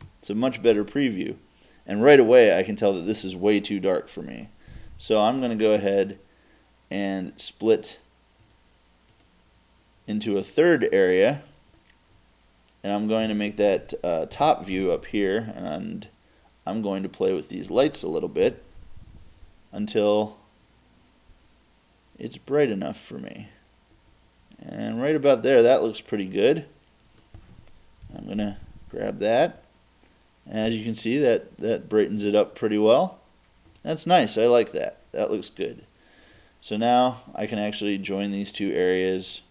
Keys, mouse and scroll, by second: 9.4-10.2 right drag, 14.3 KP_7, 17.3 right click, 18.5 g, 27.1 click, 28.1 right click, 28.1 g, 39.4 right click.